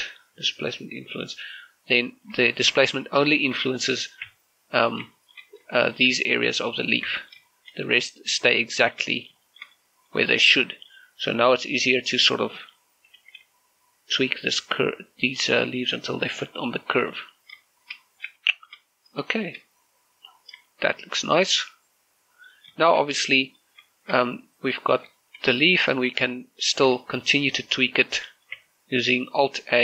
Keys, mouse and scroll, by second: 0.6 click, 1.9 scroll down 1, 2.1 middle click, 4.1 shift+middle click, 4.3 scroll up 1, 4.8 middle click, 5.1 Tab, 5.6 scroll down 1, 5.9 shift+middle click, 6.5 shift+middle click, 7.9 Tab, 8.3 shift+middle click, 9.9 scroll up 1, 10.3 shift+middle click, 10.5 middle click, 11.0 scroll up 1, 13.9 g, 14.2 z, 17.8 click, 18.1 scroll down 1, 18.5 shift+middle click, 18.9 scroll down 1, 19.1 shift+middle click, 19.7 scroll up 1, 20.1 shift+middle click, 20.5 scroll up 1, 21.3 scroll down 1, 21.5 shift+middle click, 21.8 scroll up 1, 22.3-23.7 middle drag, 23.9 scroll down 1, 24.1 middle click, 25.1 middle click, 26.3 middle click, 26.6-27.1 scroll up 1, 27.1 Tab, 27.8 right click, 29.1 shift+middle click, 29.3 Tab.